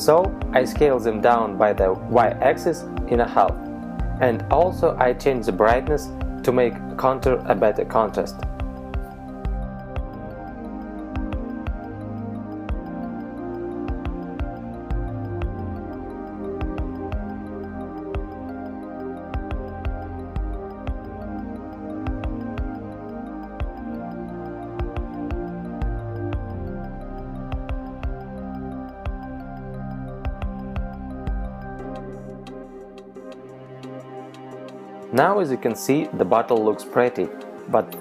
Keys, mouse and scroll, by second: 6.7 middle click, 8.8 KP_3, 9.4 z, 11.3-12.0 scroll up 4, 12.5 s, 17.7 click, 18.3 middle click, 19.2 z, 19.6 middle click, 20.4 right click, 22.4 click, 25.2 right click, 26.0-26.8 scroll down 4, 27.6 a, 28.8 KP_0, 30.8 click.